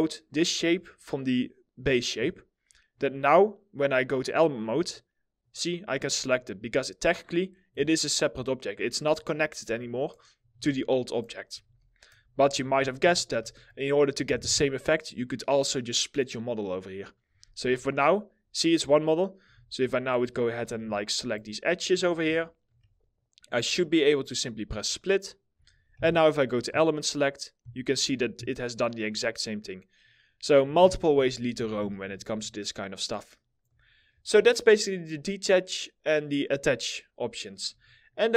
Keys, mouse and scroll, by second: 5.9 double click, 7.5 alt+middle click, 10.1 ctrl+z, 11.3 ctrl+z, 12.2 ctrl+z, 14.0 2, 17.2 5, 19.0 2, 20.2 ctrl+click, 20.6 alt+middle click, 21.4 ctrl+click, 21.7 middle click, 22.0 alt+middle click, 23.1 ctrl+click, 25.6 5, 29.9-30.2 scroll down 1, 30.4 ctrl+z, 32.2 alt+middle click, 33.5 alt+middle click, 37.3 2.